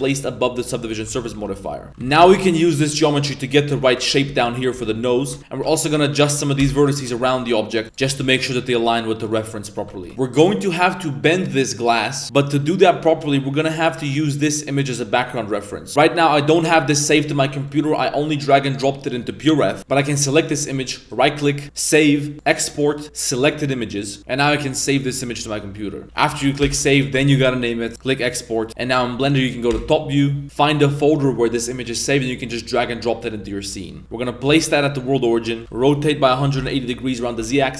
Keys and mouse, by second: 1.0 Tab, 1.3 1, 1.5 right click, 1.9 g, 1.9 z, 2.2 g, 4.3 z, 4.8 Tab, 5.2 Tab, 5.4 KP_1, 5.4 z, 5.4 g, 6.2 right click, 7.3 middle click, 8.1 middle click, 8.5 right click, 10.1 Tab, 28.8 middle click, 29.7 KP_7, 33.9 shift+middle click, 34.0 shift+s, 35.4 middle drag, 35.6 r, 37.2 middle click.